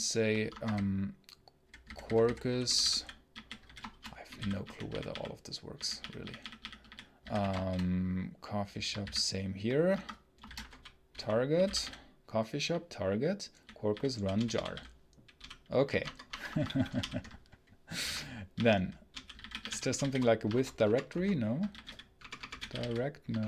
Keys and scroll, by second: 0.4 Escape, 0.6-8.0 typing, 8.9 ctrl+v, 9.8 Escape, 10.1-16.4 typing, 16.0 Return, 16.2 Return, 16.3 Escape, 16.8 ctrl+alt+l, 18.0 ctrl+d, 18.4-23.1 typing, 20.4 ctrl+space, 20.7 ctrl+BackSpace, 21.0 ctrl+space, 23.3 ctrl+BackSpace, 23.4 ctrl+space.